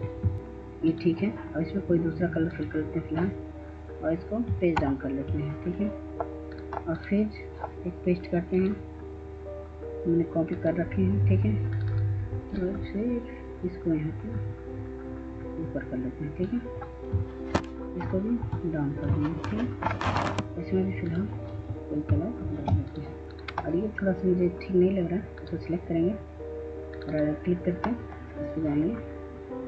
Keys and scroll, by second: 0.1 ctrl+space, 4.3 ctrl+Page_Down, 17.5 ctrl+Page_Down, 17.9 ctrl+Page_Down, 21.8 ctrl+space.